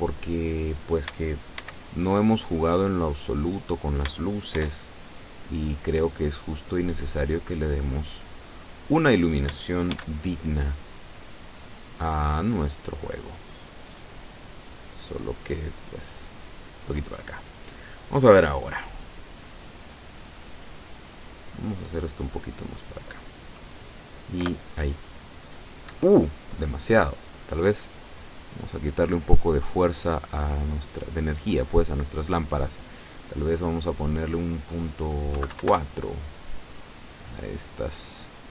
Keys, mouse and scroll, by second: 0.5 right click, 1.6 shift+d, 3.8 click, 4.6 shift+d, 6.3 click, 7.0 click, 8.3-9.4 drag, 10.0 shift+d, 11.8 click, 12.6-14.2 drag, 14.8 middle click, 15.8-18.1 drag, 18.2-18.6 scroll up 1, 18.9-20.2 middle drag, 20.6 scroll up 2, 21.1 scroll down 2, 22.1-23.1 drag, 23.9-24.3 scroll up 2, 24.4 p, 26.0 Escape, 27.1 scroll down 2, 29.2 click, 31.7 click, 35.4 KP_Decimal, 35.6 KP_4, 35.7 KP_Enter, 37.2 right click, 38.4 click.